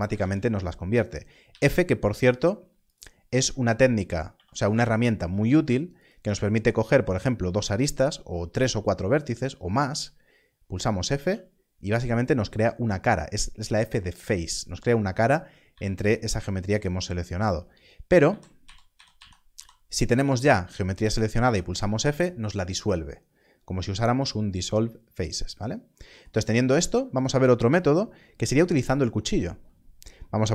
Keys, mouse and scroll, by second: 0.1 ctrl+z, 2.8 x, 2.8 click, 4.2 2, 5.9 shift+click, 17.0 alt+a, 18.2 ctrl+z, 18.5 ctrl+z.